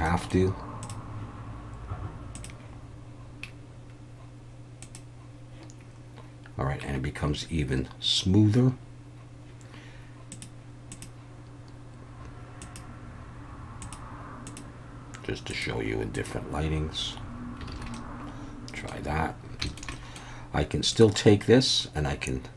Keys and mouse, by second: 0.0 middle click, 0.9 click, 2.3-5.0 drag, 10.3-17.1 drag, 17.7 alt+a, 17.9-18.9 middle drag, 19.7 shift+middle click, 19.9 middle drag.